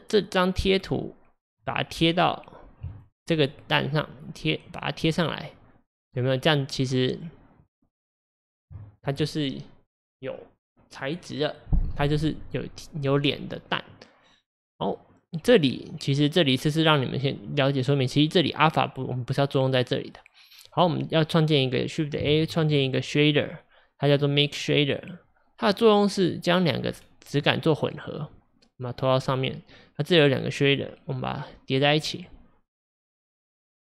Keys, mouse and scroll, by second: 2.9 ctrl+shift+click, 4.1 ctrl+shift+click, 5.1 ctrl+shift+click, 6.0 ctrl+shift+click, 7.1 ctrl+shift+click, 8.3 ctrl+shift+click, 20.2-22.2 drag, 26.3 click, 27.5-32.0 drag.